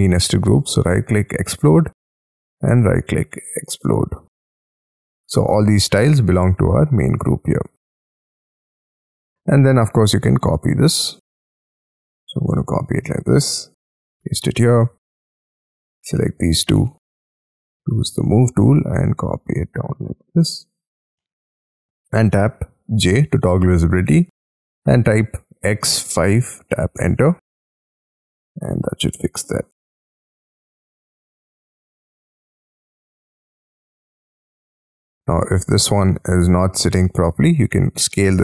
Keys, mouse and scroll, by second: 0.1 double click, 0.6 right click, 2.7 right click, 5.3 scroll down 2, 7.9 Escape, 8.7 m, 9.6-10.1 scroll up 11, 9.6 m, 11.1-12.1 scroll down 26, 12.4-13.2 scroll up 10, 13.9 shift+click, 14.2 middle click, 14.8 space, 15.2 double click, 15.6 double click, 16.2 ctrl+click, 16.6 scroll up 7, 19.9 shift+click, 20.4-21.2 scroll down 13, 21.2 middle click, 22.8 j, 23.6 scroll down 6, 25.5 x, 26.2 5, 27.0 Return, 27.7 middle click, 29.7 space, 30.0-30.6 scroll up 16, 30.6 middle click, 32.1-33.3 scroll down 27, 32.9 middle click, 33.4 scroll up 7, 33.7-34.1 scroll down 9, 34.2-35.2 scroll up 18, 35.2 ctrl+click, 35.5 ctrl+middle click, 35.5 click, 37.5 s, 38.0 scroll up 2.